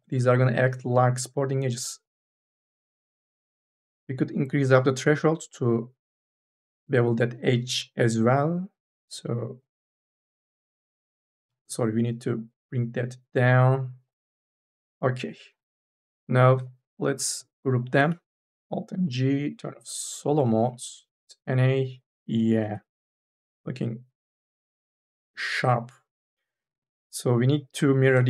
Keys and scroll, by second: 11.6 ctrl+z, 18.6 alt+g, 20.6 n, 23.1 ctrl+z, 26.2 3.